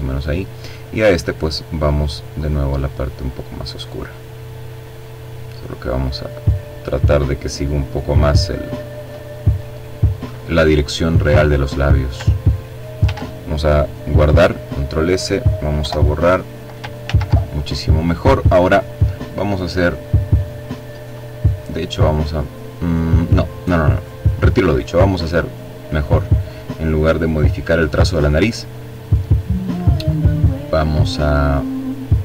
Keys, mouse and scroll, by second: 1.0-2.5 drag, 4.2-8.4 drag, 9.7 click, 11.6 ctrl+s, 13.7 click, 14.4 Delete, 15.6 ctrl+z, 18.3 click, 20.3 click, 22.9 click, 25.0 click, 25.8-27.0 drag, 27.5 click, 28.1 click, 28.6 click, 29.1 click, 29.7 click, 30.7 click, 31.4-32.2 drag.